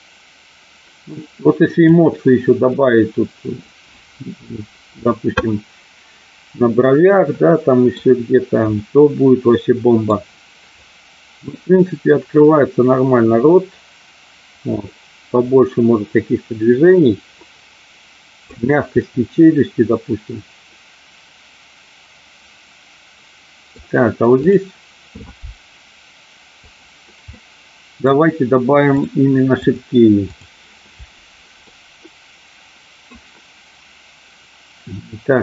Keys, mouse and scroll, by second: 7.3 middle click, 8.8-9.9 middle drag, 10.8-18.4 drag, 19.0-23.7 middle drag, 24.5 click, 26.7 click, 27.2 middle click, 29.6 click, 31.6-33.0 middle drag.